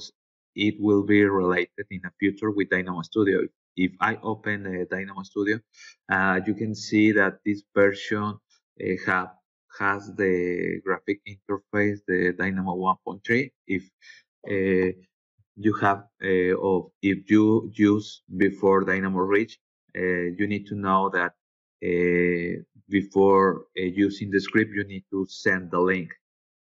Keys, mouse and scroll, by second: 0.1 click, 0.3 click.